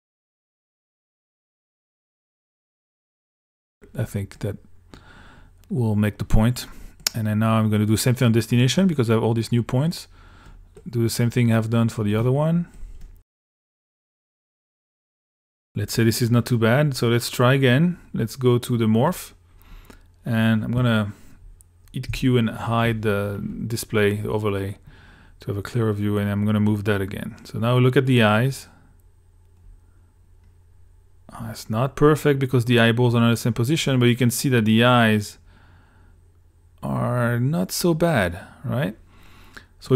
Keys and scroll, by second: 22.1 q.